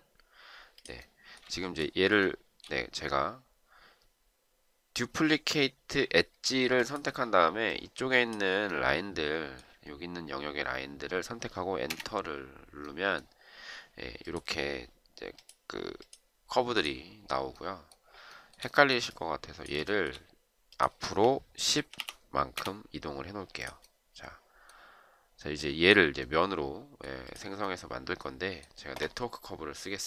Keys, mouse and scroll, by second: 1.4 shift+right click, 11.7 Return, 18.2 shift+right click, 19.8 shift+right click, 21.5-22.3 typing, 22.5 Return.